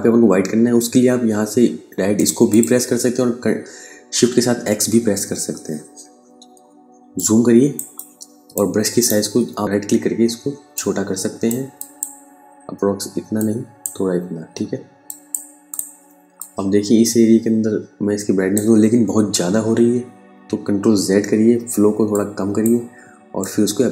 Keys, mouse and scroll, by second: 1.6 click, 4.7 x, 6.6 ctrl+click, 8.4 right click, 10.2 click, 20.5 ctrl+z, 21.6 click.